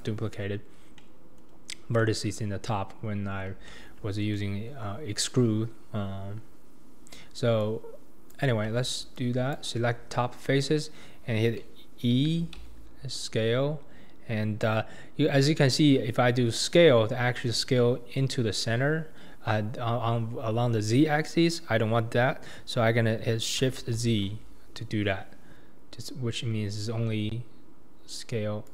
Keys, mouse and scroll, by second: 0.0 click, 0.5-1.0 scroll up 2, 1.0 middle click, 1.5-2.0 scroll down 3, 2.0 middle click, 2.5-3.0 scroll up 2, 3.0-3.7 scroll down 2, 3.7-6.2 shift+middle drag, 6.2-7.5 scroll up 1, 7.6 click, 9.2 shift+click, 12.3 e.